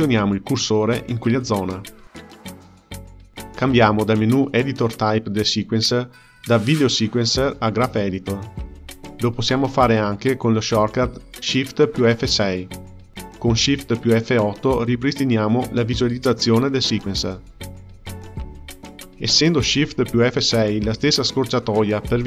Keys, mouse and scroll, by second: 4.4-7.5 drag, 10.1 shift+F6, 11.1 shift+F6, 11.7 shift+F8, 20.1 shift+F6, 20.9 shift+F6.